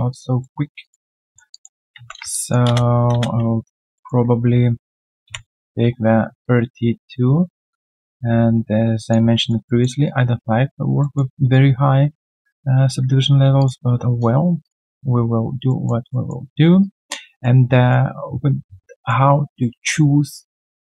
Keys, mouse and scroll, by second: 0.1 alt+click, 0.4 alt+middle click, 0.6 alt+right click, 0.8 alt+click, 1.2 alt+middle click, 1.5 alt+click, 2.3 alt+click, 3.6 alt+right click, 3.9 alt+middle click, 9.4 alt+right click, 9.6 alt+middle click, 9.9 alt+right click, 11.0 alt+middle click, 15.7 alt+middle click, 16.3 alt+scroll down 1, 16.8 alt+right click, 17.2 alt+middle click, 17.7 alt+right click, 18.9 alt+middle click.